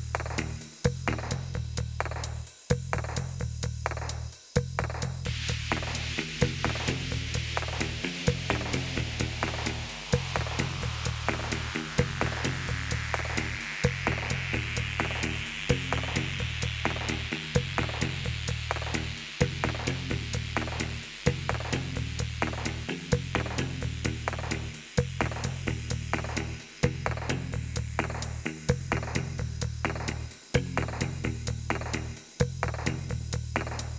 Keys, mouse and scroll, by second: 10.3 click, 12.2 click, 13.4 Delete, 14.7 click, 16.7 click, 18.8 click, 22.8 click, 24.1 click, 24.9 click, 27.5 click, 27.9 click, 29.9 click, 30.1 click, 30.5 click, 31.1 click, 31.9 click, 32.1 click, 32.2 middle click.